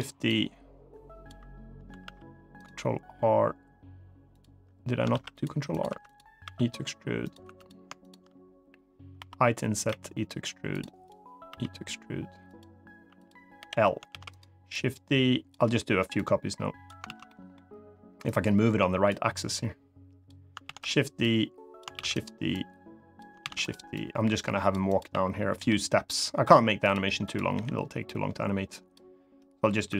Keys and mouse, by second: 0.0-1.0 drag, 1.8 ctrl+r, 4.0 click, 5.5 click, 5.6 3, 5.8 click, 6.2 e, 7.0 click, 7.2 3, 7.7 shift+click, 8.9 i, 9.5 click, 9.6 e, 10.4 click, 11.2 e, 12.2 click, 12.9 click, 13.3 l, 13.8 shift+d, 14.0 right click, 14.5 click, 15.9 click, 16.8 ctrl+z, 17.0 middle click, 18.0 click, 19.2 click, 20.4 shift+d, 20.5 right click, 21.0 click, 21.7 shift+d, 21.8 right click, 22.2 click, 23.1 shift+d, 23.3 right click, 23.8 click, 24.6 click, 25.3 l, 25.8 click, 26.6 click, 27.0 click, 27.8 click, 29.6 click.